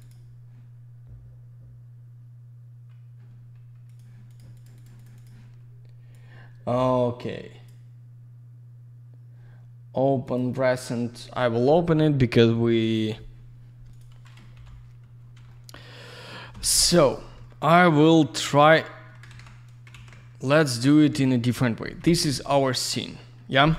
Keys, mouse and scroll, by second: 0.0 double click, 3.8 click, 3.9 click, 4.2 click, 4.3 double click, 4.5 click, 4.6 click, 4.7 click, 4.8 double click, 4.9 click, 5.0 click, 5.1 click, 5.2 double click, 6.0 click, 10.2 click, 13.8 click, 14.5-15.0 typing, 15.4 alt+middle click, 16.4 F4, 16.9 click, 17.0 click, 17.3 alt+q, 17.8 alt+middle click, 18.3 click, 18.4 click, 19.2 ctrl+z, 20.6 click, 21.0 alt+w, 21.5 alt+middle click, 21.9 F3.